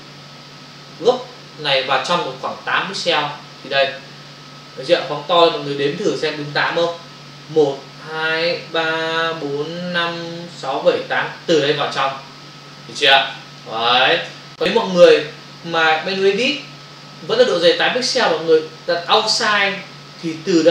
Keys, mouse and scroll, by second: 3.0 click, 4.8 space, 5.0 ctrl+click, 12.0 ctrl+o, 13.6 ctrl+click, 14.9 ctrl+alt+z, 16.2 click, 19.0 click, 20.2 click.